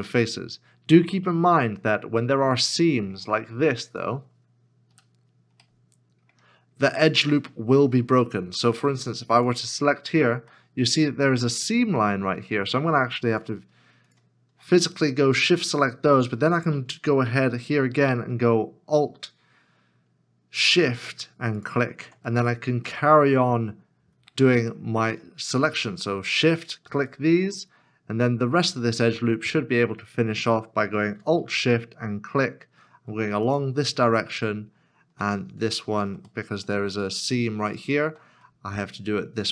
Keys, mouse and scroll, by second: 0.0 middle click, 1.2-2.0 scroll down 1, 2.2 shift+middle click, 4.9 ., 5.6 middle click, 6.5-8.6 scroll down 1, 9.5 alt+click, 10.5 middle click, 13.5 shift+click, 15.0 middle click, 21.6 alt+shift+click, 22.2 scroll down 1, 22.9 middle click, 26.3 shift+l, 27.4 shift+click, 27.8 middle click, 31.5 alt+s, 33.4 alt+shift+click, 35.7 shift+click, 36.5 middle click, 37.8 shift+click, 38.5 middle click.